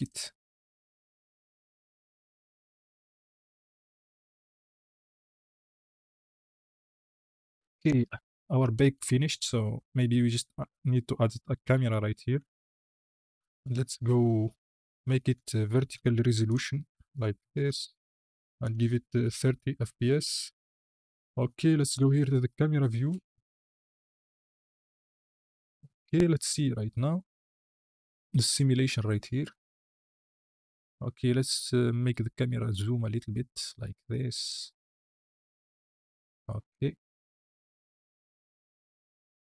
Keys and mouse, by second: 9.6 KP_1, 10.2 shift+a, 12.1 g, 12.3 y, 13.7 click, 14.4-15.8 drag, 16.5-17.6 drag, 18.6-19.5 drag, 21.8 KP_0, 23.3 click, 24.1 click, 24.8 click, 26.4 space, 30.6 space, 31.7-34.3 drag, 34.6 space, 37.2 space, 37.7-39.4 drag.